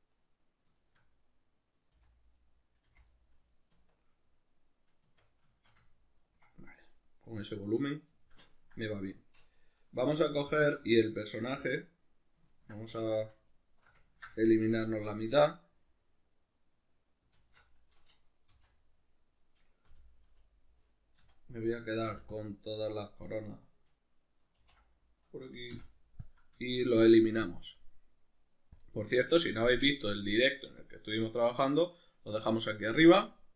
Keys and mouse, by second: 0.2 right click, 0.8 shift+right click, 2.0 f, 2.4 right click, 2.9 f, 3.2-10.3 middle drag, 3.7 Tab, 5.0 Tab, 10.3 alt+right click, 12.5-13.5 ctrl+middle drag, 13.5 alt+shift+right click, 14.0-18.9 ctrl+middle drag, 14.9 alt+q, 17.4 alt+q, 18.5 v, 19.2 right click, 19.9 l, 24.6 ctrl+i, 25.7 x, 26.6-27.4 shift+middle drag, 27.4-33.5 drag.